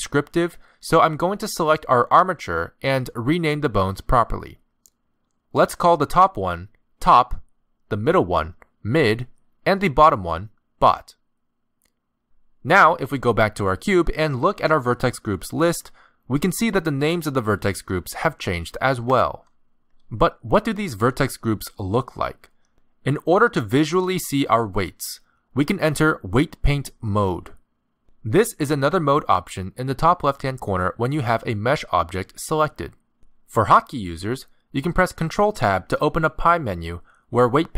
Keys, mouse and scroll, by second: 0.5 click, 0.8 click, 1.5 click, 2.6 z, 3.5 click, 4.6 click, 5.5 click, 6.0 click, 6.5 click, 8.2 click, 8.7 click, 10.4 click, 10.9 click, 13.4 click, 14.8 click, 16.2 click, 19.4 click, 20.5 click, 21.8 click, 23.1 click, 25.7 z, 29.1 click, 35.0 ctrl+Tab.